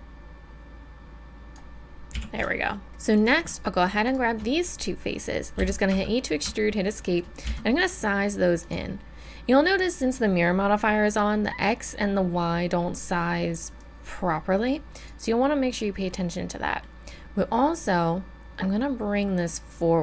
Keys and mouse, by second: 2.1 a, 3.1-5.6 right drag, 5.6 e, 7.4 s, 13.8-16.1 drag, 16.1-17.8 middle drag.